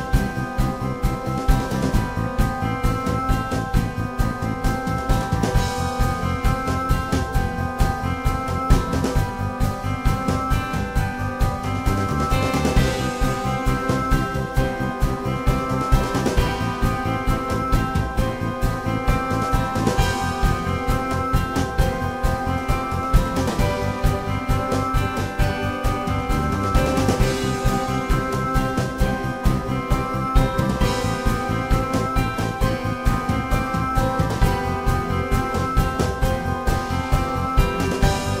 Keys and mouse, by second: 0.9-9.1 drag, 5.5 s, 9.5-13.1 middle drag, 14.1-20.3 drag, 20.3-20.6 middle drag, 20.6-29.2 drag, 26.6 i, 29.2 s, 31.1 i, 32.4-32.9 drag, 33.4 drag, 34.6 s, 36.1 drag, 37.7 g, 38.0 f.